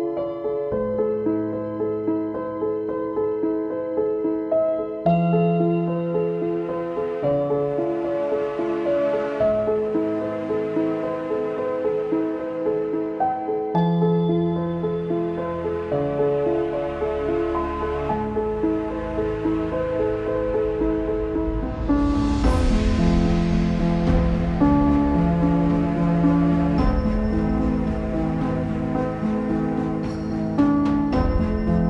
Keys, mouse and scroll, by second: 2.9 click, 3.4 scroll down 3, 3.7 Tab, 4.2 z, 5.0 click, 6.0 right click, 6.2 Tab, 6.4-6.9 scroll up 2, 6.9 s, 9.0 click, 9.4 s, 10.6-10.9 scroll up 4, 10.9 s, 11.9 scroll up 1, 12.1 shift+middle click, 12.6 shift+click, 16.9-19.0 drag, 20.5 z, 20.7-22.1 scroll up 2, 22.1 scroll up 4, 22.4 shift+middle click, 22.7-23.3 scroll up 2, 23.3 click, 24.3 middle click, 24.5 z, 24.9-25.8 scroll down 2, 25.8 right click, 26.0-26.5 scroll down 3, 26.5 click, 26.9-27.5 scroll down 3, 27.5 click, 27.9 shift+middle click, 28.5 click, 30.0 click.